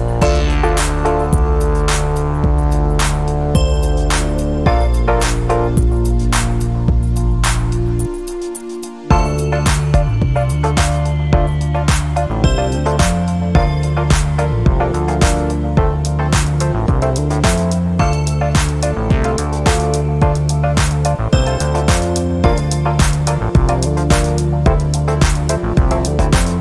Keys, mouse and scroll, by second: 0.1 1, 0.6 5, 0.9 0, 2.1 click, 2.5-3.1 scroll down 1, 3.3 scroll down 1, 4.4 click, 4.7 middle click, 6.1 click, 7.0 click, 8.2 click, 8.9-9.9 typing, 10.9 click, 11.6-12.5 typing, 13.9 click, 15.8-17.4 typing, 17.9 click, 18.8 1, 19.5 2, 19.9 3, 21.3 0, 22.9 click, 23.3 click, 24.9 click, 26.3-26.6 scroll down 2.